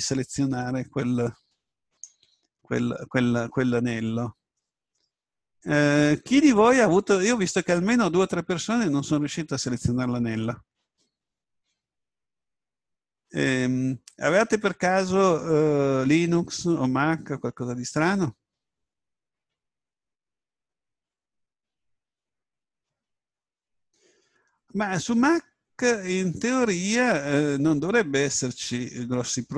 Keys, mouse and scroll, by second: 0.0 a, 1.8 right click.